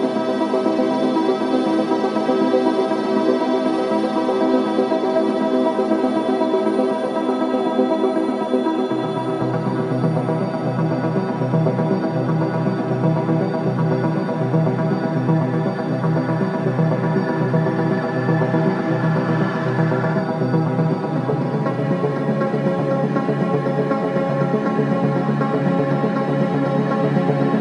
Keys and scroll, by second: 4.5 ctrl+z, 9.3 4, 12.9 ], 20.5 ctrl+z, 23.0 4.